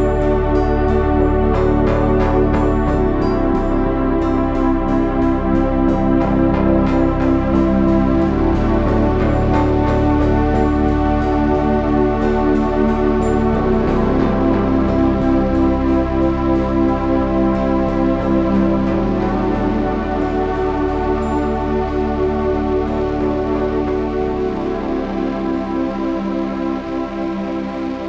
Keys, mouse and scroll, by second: 0.0 s, 4.1 Tab, 10.1 KP_3, 14.2 Tab, 14.9 KP_3, 15.2 z, 24.2 g, 26.0 g.